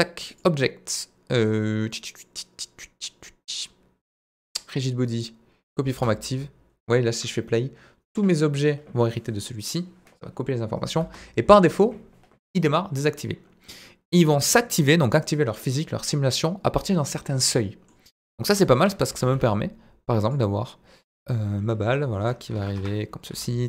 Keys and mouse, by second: 0.3-5.8 drag, 5.9 space, 11.0 space, 17.4-17.9 middle drag, 18.5 KP_1, 18.7 KP_3, 19.2 shift+a, 21.9 r, 22.5 KP_9, 22.5 KP_0, 22.8 Return, 23.3 s.